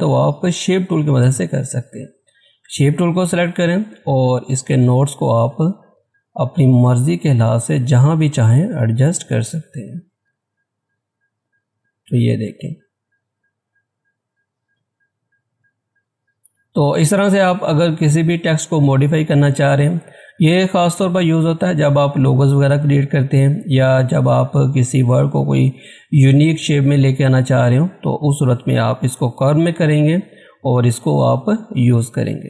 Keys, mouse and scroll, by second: 1.1 click, 4.5-14.7 drag, 14.7-17.9 drag, 31.9-32.4 scroll down 1.